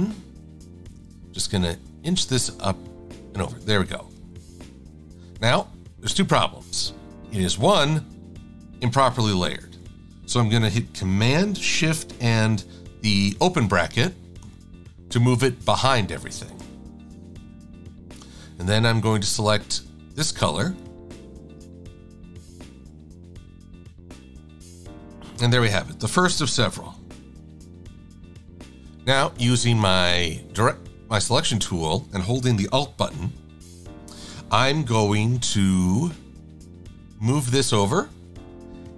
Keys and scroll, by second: 0.0 a, 1.8 Up, 2.6 Left, 4.5 shift+x, 9.2 super+-, 9.4 super+-, 22.7 shift+super+a, 25.3 a, 27.0 super+=, 27.2 super+=.